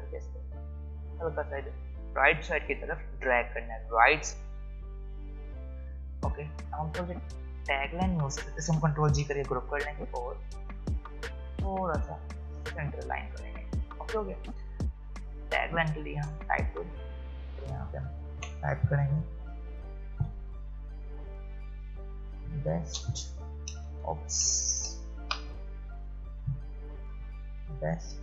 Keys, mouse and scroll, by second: 7.4 click, 9.1 ctrl+g, 11.0-16.2 drag, 20.0-22.8 typing, 26.3-28.2 typing.